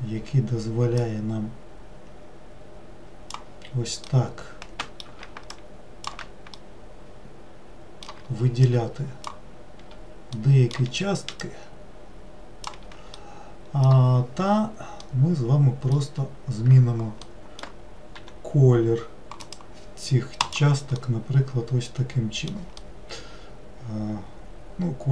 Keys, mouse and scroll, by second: 1.0-4.1 drag, 4.1-5.5 middle drag, 5.5-6.6 shift+drag, 6.6-8.7 middle drag, 8.7-10.4 shift+drag, 10.4-11.4 middle drag, 11.4-13.2 shift+drag, 13.2-18.2 middle drag, 18.2 g, 20.4 click, 21.0-25.1 middle drag.